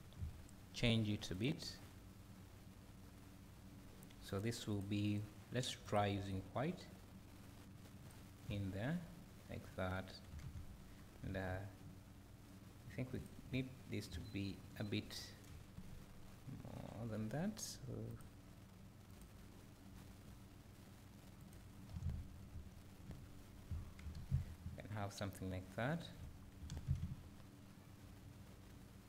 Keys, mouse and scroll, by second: 2.3 click, 4.3 click, 10.1-11.0 scroll down 1, 11.0 scroll up 1, 11.3 Tab, 13.3 alt+click, 16.0 ctrl+KP_Add, 18.1 click, 19.2-21.6 drag, 22.7 Tab, 23.1 `, 24.4 scroll down 1, 24.6 `, 26.4 scroll down 1, 27.0 `.